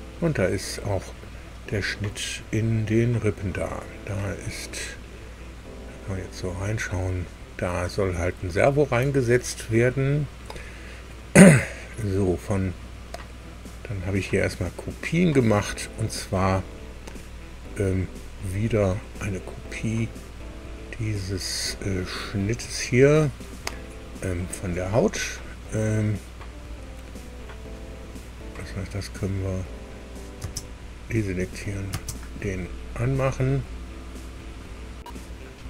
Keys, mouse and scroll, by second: 0.6 middle click, 1.7-4.8 middle drag, 5.0-5.5 scroll up 1, 5.6 scroll up 1, 6.3-9.4 drag, 10.0-10.4 scroll down 1, 20.9 scroll up 2, 23.6 scroll down 2, 24.1 scroll down 2, 28.6 click, 29.7 click, 31.4 click, 31.9 space, 35.2 scroll down 2.